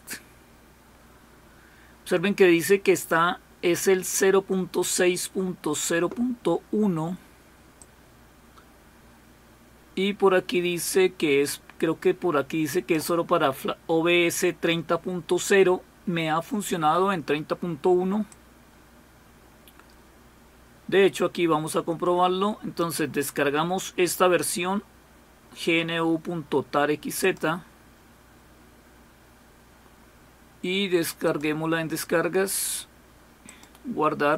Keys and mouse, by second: 7.8-13.0 drag, 18.3-23.3 drag, 27.2 click, 31.2 click, 33.5 click.